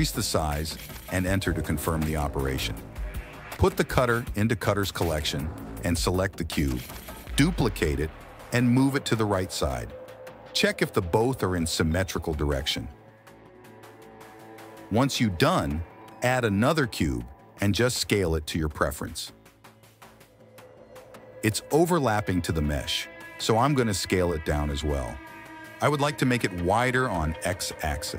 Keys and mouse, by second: 3.6 click, 3.8 m, 4.4 click, 4.8 m, 7.6 KP_3, 8.5 click, 9.1 shift+d, 12.2 click, 12.4 g, 13.4 click, 13.6 g, 14.5 click, 15.8 KP_1, 16.1 shift+a, 16.9 s, 17.3 g, 18.5-20.7 typing, 21.8 s, 23.7 KP_3, 23.8 KP_1, 25.0 g, 26.8 s, 27.6 g.